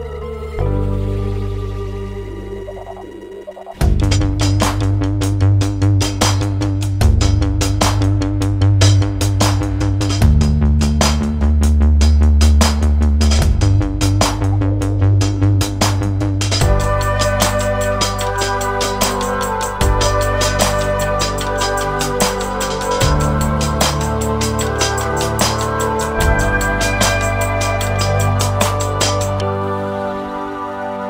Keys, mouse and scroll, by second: 0.2 middle click, 0.8 click, 1.1 click, 3.4 click, 3.9 click, 4.5-5.2 scroll down 2, 5.6 middle click, 8.3 click, 9.2 click, 9.9 scroll down 3, 10.0 middle click, 10.4 click, 11.6 click, 14.4 click, 15.4 click, 16.6 middle click, 17.1 click, 18.0 click, 18.8 click, 19.2 middle click, 20.0 scroll down 2, 20.2 middle click, 21.7 click, 24.0 click, 25.2 space, 29.4 space, 30.4 click.